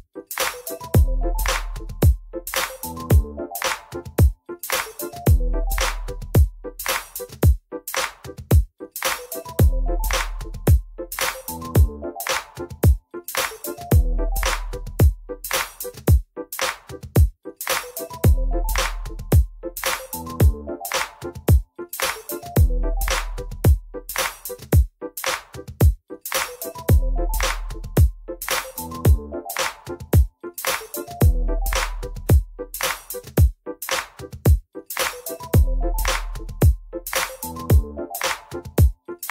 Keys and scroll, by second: 0.4-1.3 typing, 2.0 alt+x, 6.4 F3, 8.4 F3, 10.2 F4, 13.0 F4, 13.6 F4, 15.1 alt+x, 17.1 F3, 18.4 F4, 26.6 ctrl+t, 26.8 1, 27.1 ctrl+a, 28.6 ctrl+shift+c, 37.6 alt+x, 37.9 F4, 38.7 alt+c.